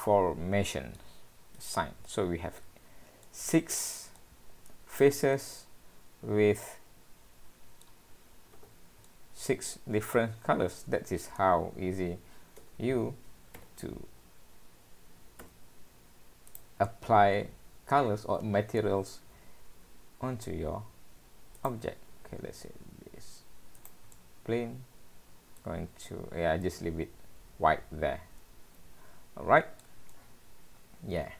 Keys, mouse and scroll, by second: 1.6 click, 2.1 middle click, 2.8-3.2 scroll down 3, 3.3 middle click, 4.2 middle click, 5.3 middle click, 8.6 alt+a, 9.1 middle click, 13.1 Tab, 13.6 g, 16.9 middle click, 19.3 shift+a, 22.1 s, 24.1 middle click, 26.1-26.7 scroll up 3, 26.7 middle click, 30.1 middle click.